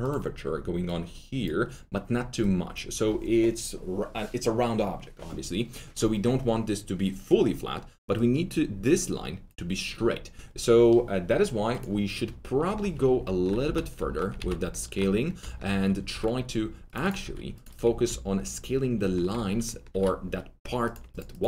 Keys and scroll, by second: 13.6 ctrl+alt+z, 14.7 ctrl+alt+z, 16.1 typing, 17.2 2, 19.9 alt+4.